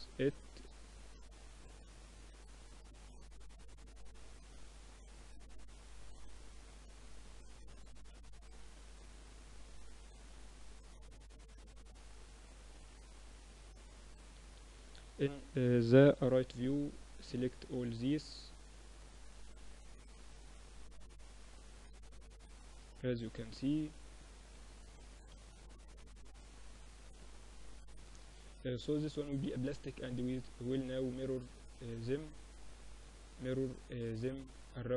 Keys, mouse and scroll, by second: 0.7-4.5 drag, 2.7 Tab, 3.4 ctrl+r, 4.9 ctrl+r, 6.4 ctrl+r, 8.4 ctrl+r, 9.7 Tab, 10.0-11.9 drag, 11.6 Tab, 12.4-13.5 middle drag, 13.5 KP_3, 13.9 z, 14.3 a, 15.3 b, 17.3-18.9 drag, 18.3 z, 18.6 Tab, 18.9-21.5 middle drag, 19.9 Tab, 20.2 Tab, 22.2 Tab, 22.9 ctrl+r, 24.3 ctrl+r, 25.6 Tab, 27.5-28.8 middle drag, 29.6-32.3 drag, 33.5 middle click, 34.1-34.9 drag.